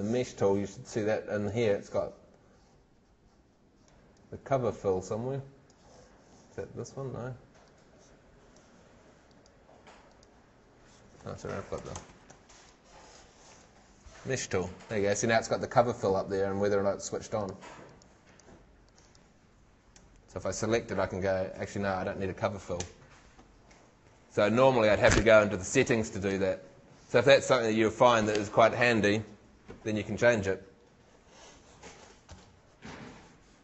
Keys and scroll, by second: 11.8 shift+Home, 20.0 shift+Home.